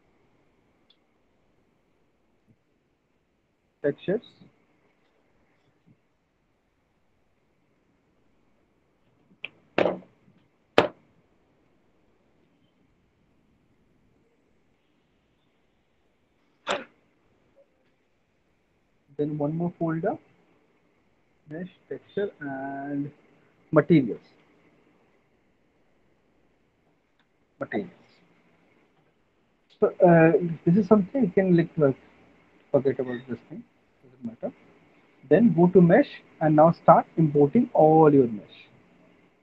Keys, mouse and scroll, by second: 1.7-4.3 typing, 20.2 right click, 20.2 click, 24.3 typing, 29.0 typing, 38.5 click.